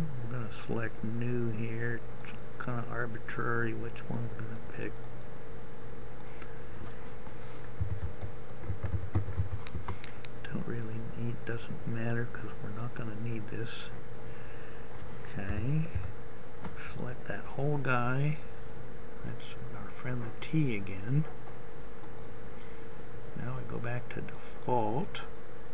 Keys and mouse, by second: 15.8 a, 16.2 a.